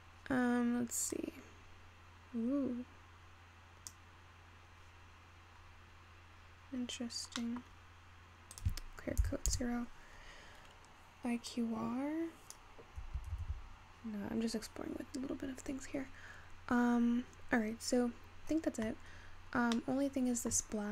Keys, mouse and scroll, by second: 0.7-1.2 scroll up 1, 1.2-4.2 drag, 5.2-6.1 scroll up 9, 6.4-7.6 scroll down 9, 7.6-8.6 middle drag, 8.6-14.7 drag, 14.7 ctrl+z, 14.9-17.8 scroll down 3, 17.9-18.3 scroll down 4, 18.3-19.4 scroll up 3, 19.4-19.9 scroll down 3, 19.9-20.9 middle drag.